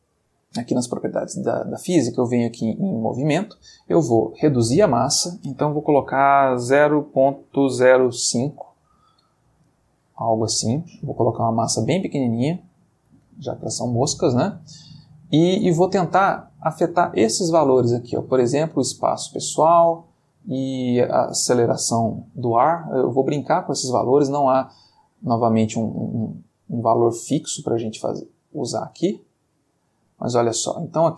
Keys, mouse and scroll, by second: 0.1 middle click, 2.0 click, 3.3 middle click, 4.8 click, 6.7 ., 7.7 0, 8.2 5, 8.5 Return, 15.5 space, 18.5-19.8 drag, 25.2-28.8 drag, 28.9 space.